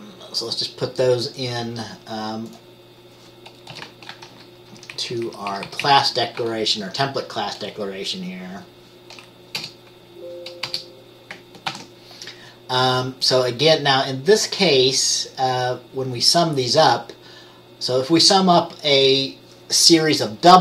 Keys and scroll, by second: 3.8 Return, 4.3 ctrl+v, 4.9 Up, 5.1 Up, 5.2 Up, 5.4 Up, 5.6 Down, 5.8 Down, 5.9 Down, 6.9 ctrl+k, 9.7 BackSpace, 10.8 BackSpace, 11.8 ctrl+s.